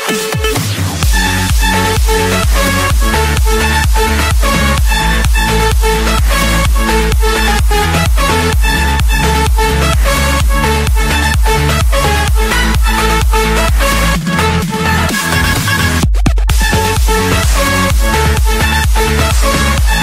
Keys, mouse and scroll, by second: 0.5 Return, 2.2-2.9 scroll, 3.2 click, 4.0 click, 5.0 Return, 5.9-7.0 scroll up 1, 8.4 click, 10.6 click, 12.8 Return, 13.0 scroll up 1, 13.2 middle click, 14.7-15.8 drag, 16.4-17.6 drag, 17.7-18.9 drag, 19.0-20.0 drag.